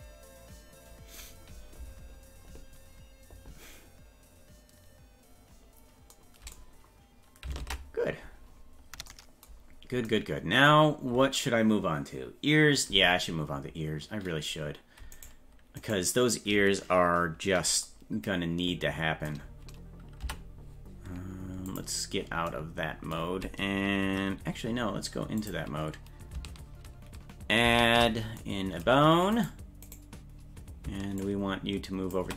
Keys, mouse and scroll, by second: 7.6 ctrl+Tab, 8.5-8.9 scroll down 5, 9.7-10.1 scroll down 2, 15.2 right click, 15.9-17.8 right drag, 20.2 Tab, 21.7 click, 25.4 click, 27.6 shift+a, 29.4 right click, 29.9 right click, 31.2 ctrl+click.